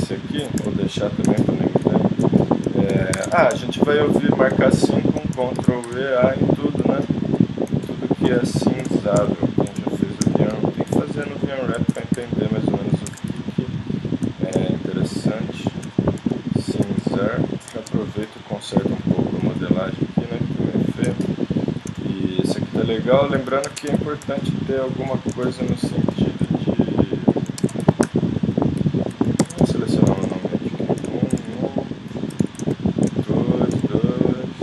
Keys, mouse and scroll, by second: 0.6 z, 1.7-3.4 middle drag, 3.1 ctrl+Tab, 5.6 ctrl+e, 11.9 ctrl+e, 13.1 ctrl+Tab, 16.2 s, 18.2 ,, 19.0 s, 21.1-22.2 drag, 22.2-23.3 middle drag, 23.7 ctrl+Tab, 24.1-25.6 middle drag, 27.6 ctrl+Tab, 29.4 ctrl+Tab, 31.4 z, 32.1 middle click, 32.4 z, 33.2 middle click, 33.6 middle click.